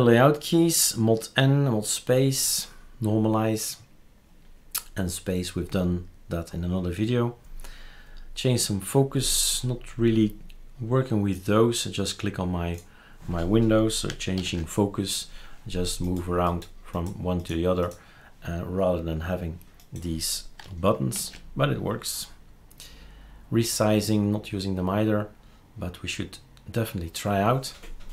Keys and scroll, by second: 14.3 ctrl+alt+t.